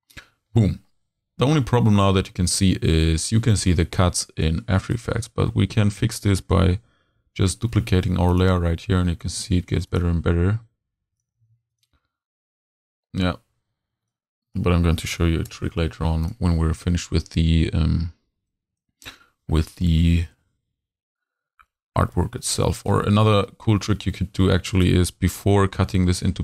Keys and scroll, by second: 7.2 super+c, 7.5 super+v, 9.4 super+v, 11.4 super+v, 15.5 shift+BackSpace, 25.7 super+z.